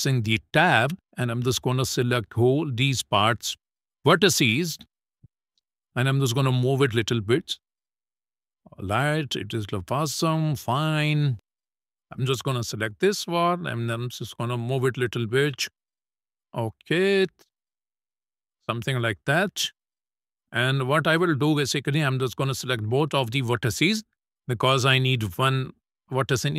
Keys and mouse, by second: 0.7 shift+middle click, 1.4-2.5 drag, 3.6 click, 4.6-6.3 drag, 6.7 shift+middle click, 7.1 click, 8.4 click, 9.6 shift+middle click, 10.7 click, 11.6 click, 12.9-14.4 drag, 14.9 middle click, 16.3 click, 16.9 shift+middle click, 17.2 middle click, 18.0-19.2 drag, 20.2 middle click, 20.7 shift+middle click, 22.2 shift+click.